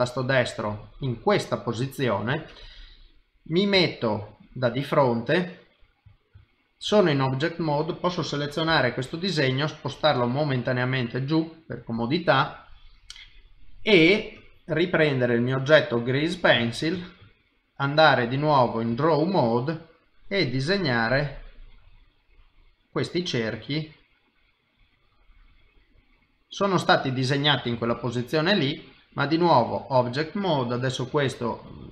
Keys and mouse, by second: 1.3 middle click, 3.7 KP_1, 7.2 click, 8.7 g, 16.2 click, 16.9 ctrl+Tab, 20.2 click, 23.1 click, 25.0 click, 25.7 middle click, 27.9 ctrl+Tab, 29.8 click, 31.6 click.